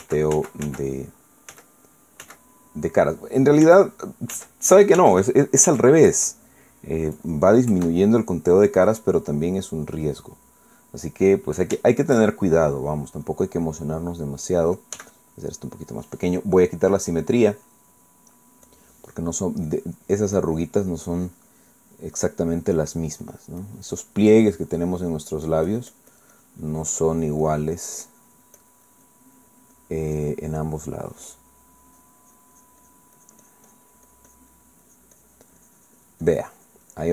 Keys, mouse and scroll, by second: 2.5 ctrl+z, 3.2 ctrl+z, 4.6 ctrl+z, 5.3 ctrl+z, 6.0 ctrl+z, 6.7 ctrl+z, 7.5 ctrl+click, 8.7 KP_Add, 11.4-12.0 middle drag, 12.8-13.8 shift+middle drag, 14.2-15.4 drag, 15.9 f, 16.6 click, 18.5 click, 20.7-26.1 drag, 25.9 middle click, 26.4-30.5 drag, 30.7 click, 31.5 middle click, 32.8-34.1 drag, 35.5 click, 35.9-37.1 drag.